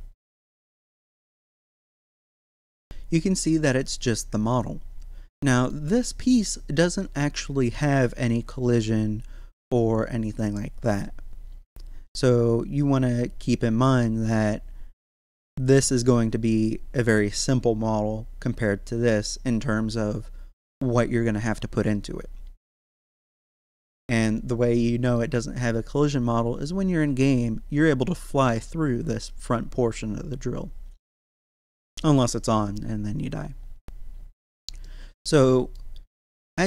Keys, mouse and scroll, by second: 0.5 click, 2.6-3.1 scroll up 1, 3.7 right click, 5.3-15.3 middle drag, 23.0-28.2 middle drag, 31.1-34.8 middle drag, 34.8-36.3 middle drag, 36.3 scroll up 1.